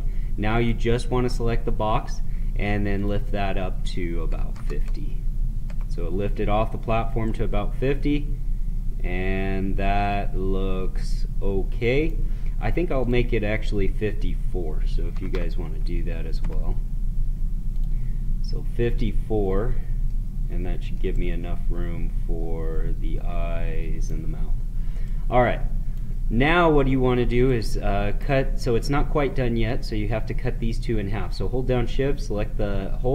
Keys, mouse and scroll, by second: 0.5 click, 2.8 click, 7.5 right click, 8.3-9.4 right drag, 12.9 click, 17.6 click, 20.0 middle click, 21.1-28.8 right drag, 28.8-32.1 middle drag.